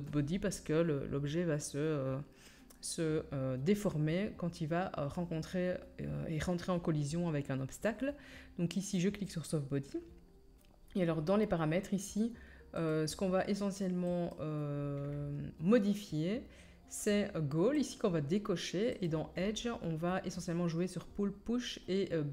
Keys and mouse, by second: 8.8-17.9 middle drag, 19.0-22.3 middle drag.